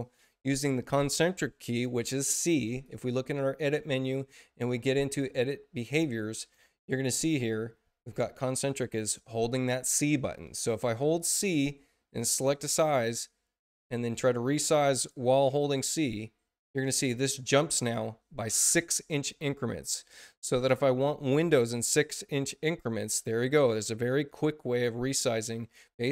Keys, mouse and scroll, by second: 2.6 click, 11.3 click, 12.3-15.0 drag, 14.8 right click, 14.8 c, 15.9-26.1 drag.